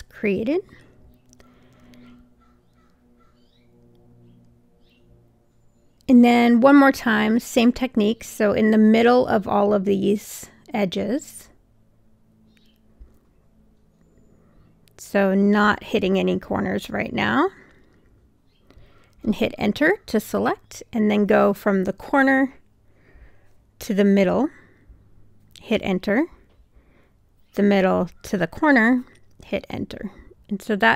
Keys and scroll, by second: 19.0 Return, 21.9 1, 25.6 Return, 29.8 Return.